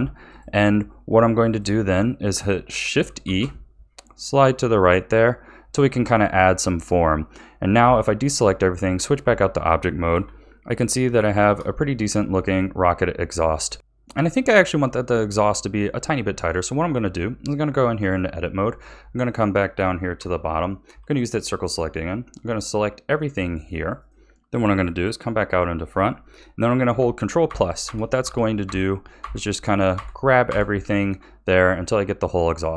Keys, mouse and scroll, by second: 0.3 alt+shift+click, 1.5 click, 2.0-3.2 shift+middle drag, 3.2 shift+e, 7.8 a, 8.2 Tab, 9.2 a, 10.1 KP_1, 10.8-11.3 scroll down 2, 11.3-15.6 shift+middle drag, 15.9 Tab, 18.1-20.1 middle drag, 20.1 3, 20.8 c, 25.0 KP_1, 27.4 ctrl+KP_Add, 27.8 ctrl+KP_Add, 28.2 ctrl+KP_Add, 28.6 ctrl+KP_Add, 29.2 ctrl+KP_Add, 29.9 ctrl+KP_Add, 30.5 ctrl+KP_Add.